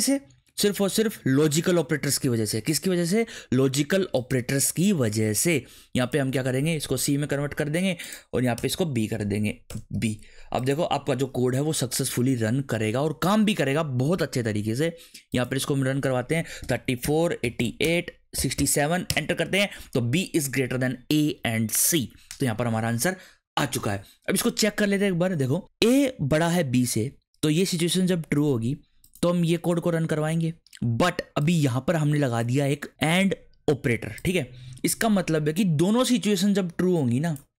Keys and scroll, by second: 6.7 Delete, 6.9 c, 8.6 BackSpace, 8.7 a, 9.7 BackSpace, 9.9 b, 10.8 ctrl+s, 16.4-19.0 typing, 19.1 Return.